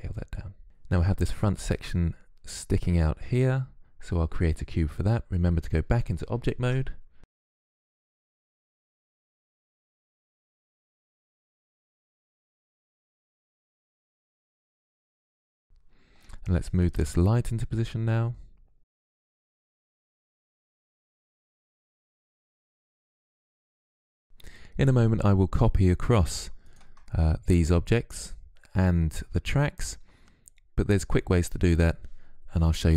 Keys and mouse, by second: 6.4 Tab, 7.6 shift+a, 8.4 s, 9.5-11.8 typing, 9.7 middle click, 15.0 s, 16.7 click, 17.0 middle click, 17.3-18.6 drag, 19.4 click, 20.2 s, 22.8 click, 23.1-26.5 middle drag, 26.5-28.4 drag.